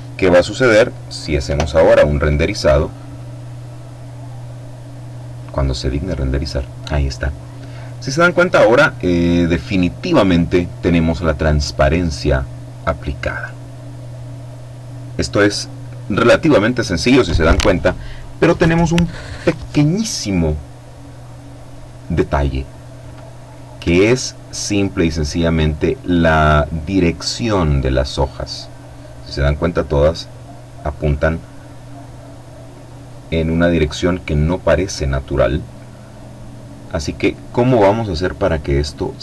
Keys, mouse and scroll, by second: 0.7 F12, 34.7-36.8 drag.